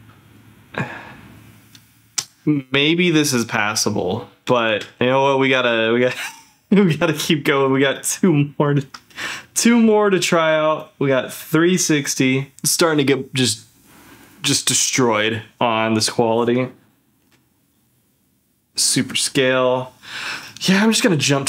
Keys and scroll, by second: 4.7 ctrl+f, 9.2 z, 12.5 ctrl+f, 17.2 ctrl+f.